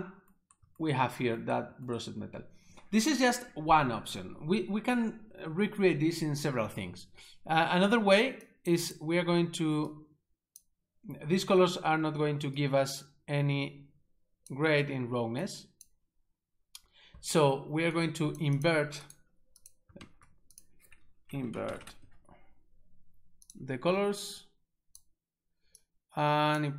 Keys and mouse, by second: 8.5 click, 8.9 click, 10.0 click, 12.6 click, 15.5 click, 18.0 click, 18.6 click, 19.1 double right click, 19.6 click, 20.0 shift+a, 20.5 click, 21.3-21.8 typing, 22.0 Return, 23.4 click, 24.4 click, 25.9 click.